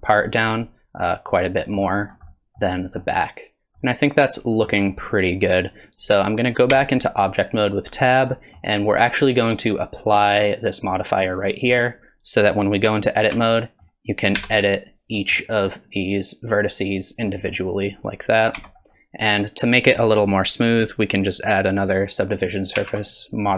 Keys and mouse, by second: 1.5 middle click, 2.3 middle click, 3.0 middle click, 3.8 middle click, 6.7 Tab, 8.3 middle click, 9.6-11.8 drag, 13.3 Tab, 13.6 middle click, 14.4 1, 15.2 middle click, 17.3 middle click, 18.5 Tab, 22.8 ctrl+2.